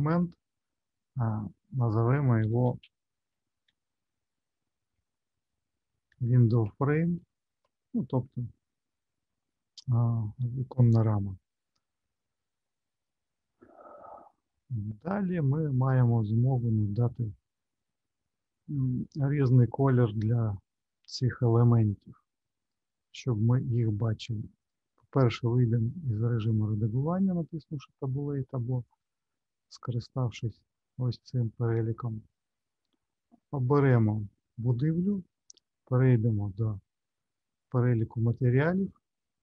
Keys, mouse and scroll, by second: 12.2 middle click, 22.5 click, 24.6 click, 33.7 click, 36.7 click.